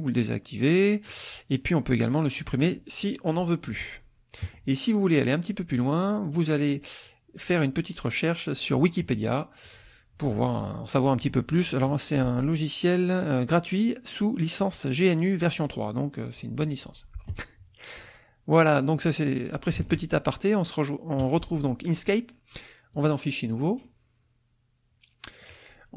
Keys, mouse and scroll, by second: 0.1 click, 1.1 click, 2.6 click, 4.4 middle click, 6.2 click, 8.8 click, 9.6 click, 11.5-12.5 scroll down 4, 17.3 click, 19.9 alt+Tab, 21.2 alt+click, 22.9 click, 23.4 click.